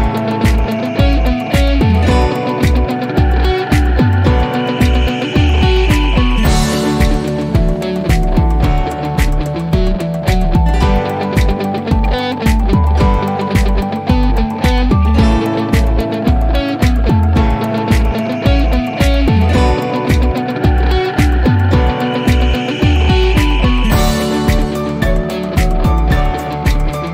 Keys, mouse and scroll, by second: 0.8-4.0 drag, 5.3 scroll down 1, 8.3 click, 10.0 scroll down 1, 12.2 l, 13.1 scroll down 1, 15.1-15.9 drag, 20.3 Return, 22.2 click, 24.7 typing, 25.8 Return.